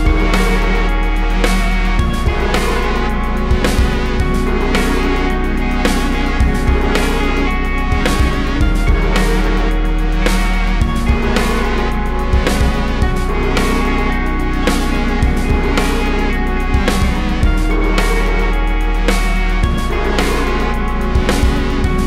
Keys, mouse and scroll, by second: 2.2 click, 6.3 ctrl+shift+click, 8.2-12.1 drag, 13.6 click, 14.2-16.9 drag, 21.4 click.